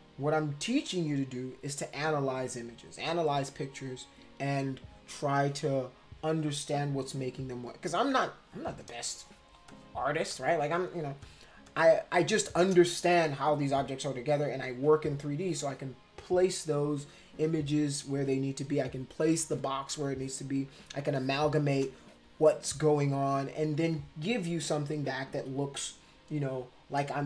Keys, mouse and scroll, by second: 8.9 space, 9.0 click, 9.7 click, 10.3 click, 11.2 click, 11.7 click, 12.3 click, 19.3 space, 19.3-20.6 drag, 21.1 space, 21.1 click.